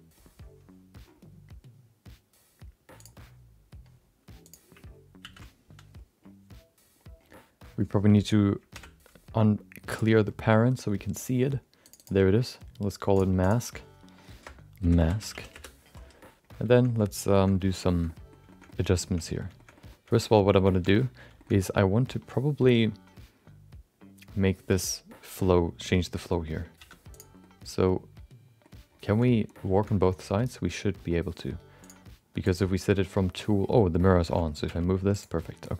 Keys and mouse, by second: 2.9 click, 4.6 click, 5.4 ctrl+a, 8.7 alt+p, 13.7-16.0 drag, 16.8 middle click, 17.3 shift+middle click, 17.5 middle click, 17.9 shift+middle click, 18.1 middle click, 18.4 shift+middle click, 18.6 middle click, 19.0 Tab, 19.5 shift+middle click, 19.7 middle click, 20.1 middle click, 20.3 middle click, 20.7 shift+middle click, 21.3 shift+middle click, 21.5 middle click, 26.7 3, 27.1 click, 27.4-28.6 middle drag, 29.1 shift+middle click, 29.3 middle click, 29.7 shift+middle click, 31.8 click, 32.4 click, 33.9 middle click, 34.3 middle click, 34.6 g, 35.4 middle click.